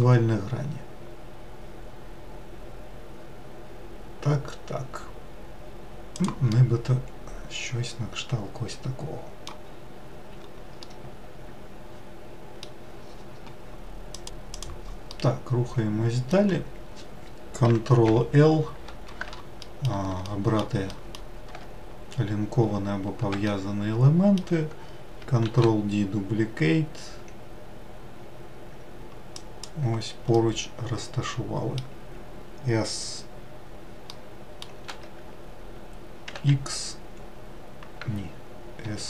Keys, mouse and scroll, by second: 6.5-9.6 middle drag, 9.8-10.5 scroll down 2, 10.5-10.9 scroll down 1, 10.9-14.0 middle drag, 14.8-17.7 middle drag, 17.7 ctrl+l, 19.4 alt+middle click, 19.9 alt+middle click, 20.6 alt+middle click, 21.7 scroll up 1, 22.3-22.7 scroll up 2, 23.1-25.2 shift+middle drag, 25.2 shift+d, 30.0-33.1 middle drag, 33.8 middle click, 34.6 s.